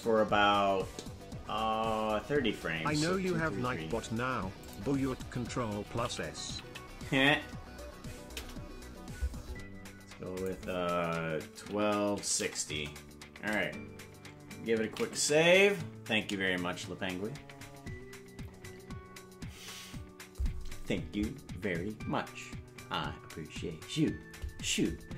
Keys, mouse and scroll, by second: 4.6-9.3 drag, 6.6 KP_3, 10.3-20.5 drag, 16.9 ctrl+s.